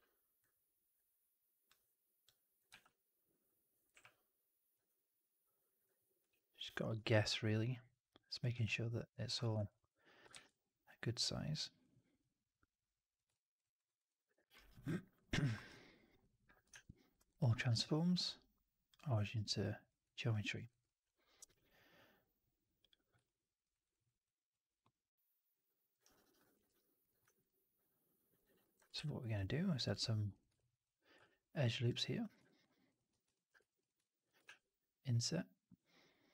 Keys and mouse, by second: 0.3-1.6 drag, 2.1 click, 2.6 r, 3.8 w, 4.6-5.7 drag, 6.1 r, 6.8 w, 7.4 click, 8.4 r, 9.1 w, 9.4 alt+right drag, 9.6-10.1 alt+drag, 10.2 shift+x, 13.5 alt+right drag, 13.7 alt+right drag, 13.9 alt+drag, 14.3 alt+middle drag, 14.4 alt+right drag, 14.6-15.0 alt+drag, 15.1 alt+right click, 15.3 alt+middle drag, 15.4 alt+right drag, 15.6-16.1 alt+drag, 16.6 shift+Tab, 17.6 shift+Tab, 19.1 right drag, 19.3-19.8 drag, 19.9 right drag, 20.2 drag, 20.4 alt+middle drag, 20.6 alt+right drag, 20.7-21.3 alt+drag, 23.1-23.5 alt+drag, 23.6 alt+right drag, 23.8 alt+right drag, 24.1 alt+click, 24.7-25.8 alt+middle drag, 25.9 alt+right drag, 26.1 alt+right drag, 26.3 alt+click, 26.5 3, 26.9 click, 27.2 alt+right click, 27.3 alt+click, 28.3 alt+right click, 28.5 alt+click, 28.8-29.3 typing, 30.4 click, 31.1 click, 32.1 click, 32.4 alt+click, 33.0 w, 33.2 alt+click, 33.5 3, 33.7 click, 33.9 alt+click, 34.3 shift+Tab.